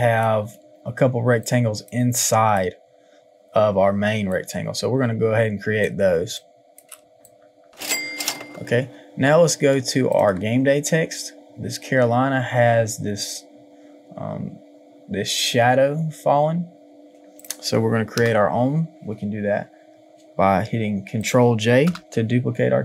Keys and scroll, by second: 0.5 ctrl+z, 6.2 space.